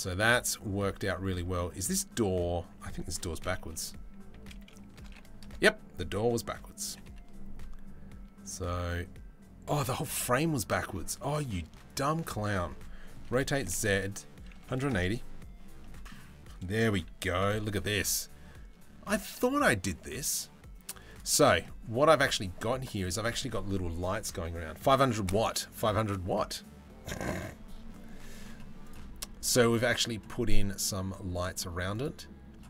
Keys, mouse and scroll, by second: 0.0 Tab, 1.0 Tab, 3.0 t, 3.9 r, 6.4 g, 9.9 ctrl+z, 12.8 r, 15.4 middle click, 16.9 g, 21.2 middle click, 28.4 middle click, 31.6 middle click.